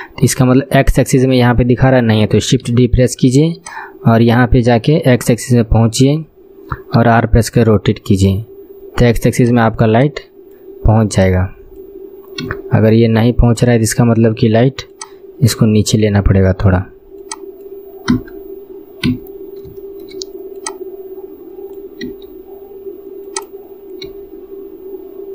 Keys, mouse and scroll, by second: 0.5-2.8 shift+middle drag, 2.8 shift+d, 3.7 click, 5.3 click, 7.1 r, 10.0-11.3 drag, 12.5 KP_3, 13.7 scroll up 1, 15.0 click, 15.0 scroll up 2, 17.3 click, 18.2 KP_3, 19.2 KP_1, 19.9 shift+middle click, 20.7 click, 21.9 click, 22.1 r, 24.2 r.